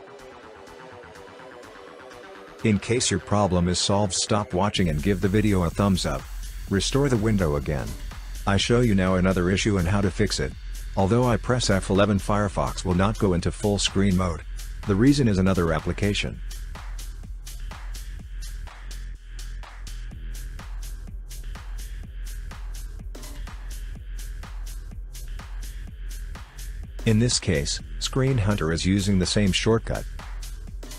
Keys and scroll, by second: 6.3 F11, 9.4 F11, 11.1 F11, 13.4 F11, 14.3 F11.